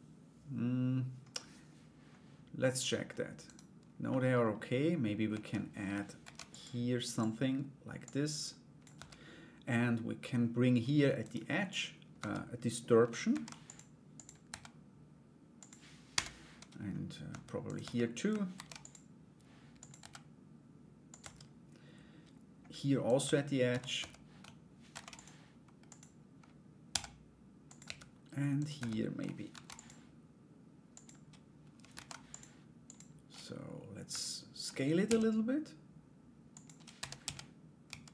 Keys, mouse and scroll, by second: 3.0 right click, 3.7 middle click, 4.9 Tab, 5.8 ctrl+r, 7.6 click, 8.5 Tab, 10.8 right click, 11.7 Tab, 12.9 ctrl+r, 14.0 s, 15.7 o, 16.9 Tab, 17.2 right click, 18.1 ctrl+r, 19.5 s, 20.8 Tab, 22.6 right click, 24.5 ctrl+r, 26.4 s, 27.4 Tab, 28.1 right click, 29.1 ctrl+r, 33.7 alt+right click.